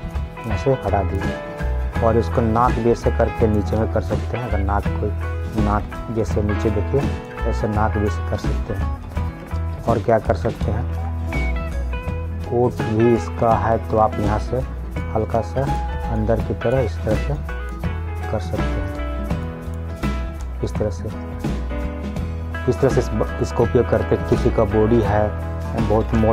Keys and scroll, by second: 6.1 ctrl+z, 9.7 ctrl+z.